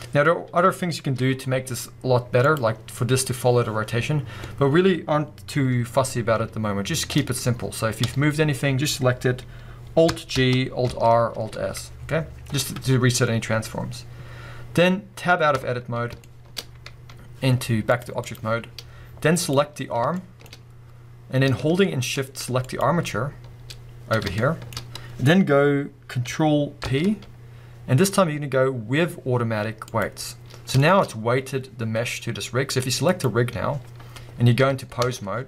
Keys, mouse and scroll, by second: 0.3-1.2 scroll up 1, 1.2 g, 2.5 click, 2.7 scroll up 1, 4.5 scroll down 1, 8.0 a, 10.3 alt+g, 10.9 alt+r, 11.3 alt+s, 12.0 scroll down 1, 15.5 Tab, 16.0 scroll down 1, 16.2-17.9 shift+middle drag, 17.9-19.5 drag, 18.7 scroll up 1, 19.9 scroll down 1, 20.1-22.6 shift+middle drag, 20.6 scroll up 1, 22.6 shift+click, 24.4-24.8 shift+middle drag, 24.8-26.4 scroll up 1, 26.8 ctrl+p, 30.5 scroll down 2, 30.6-33.1 shift+middle drag, 31.1 scroll up 1, 33.1 click, 35.0 ctrl+Tab.